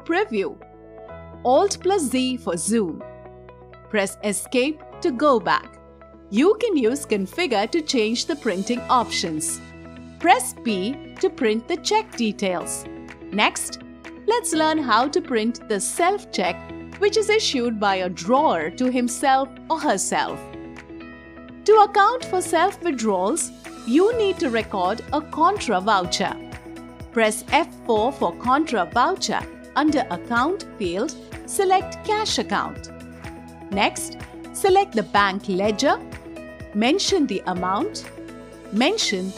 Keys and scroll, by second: 1.5 alt+z, 3.9 Escape, 10.2 p, 26.9 F4.